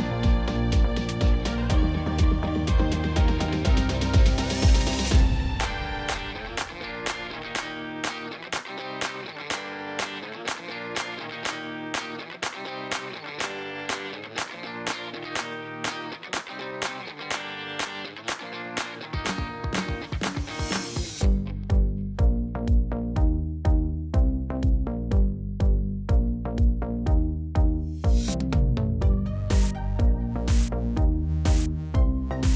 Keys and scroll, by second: 5.1 Tab, 8.6 shift+z, 12.8 ctrl+r, 21.7 shift+z, 29.3 Tab, 30.6 Tab.